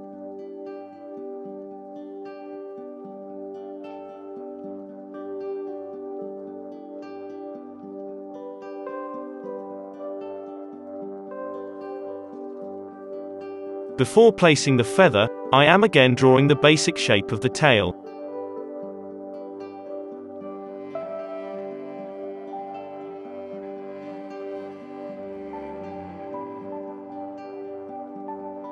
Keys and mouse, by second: 0.0 Tab, 0.0 middle click, 0.2-2.3 typing, 0.7 ctrl+r, 0.9-4.5 drag, 0.9 right click, 3.3 g, 3.8 g, 4.1 ctrl+z, 4.5 middle click, 4.6 click, 4.6 g, 5.0 ctrl+z, 5.0 ctrl+r, 5.5 ctrl+r, 5.8-9.2 drag, 5.9-9.0 typing, 8.9 Tab, 9.9-11.2 drag, 10.6-15.9 typing, 11.2-13.3 middle drag, 13.9 click, 15.3 click, 15.7 click, 17.3-24.2 drag, 21.2 ctrl+z, 21.9 ctrl+z, 24.2 ctrl+z, 24.2-28.4 middle drag, 26.1 Escape, 28.4 click, 28.4 r, 28.4 s.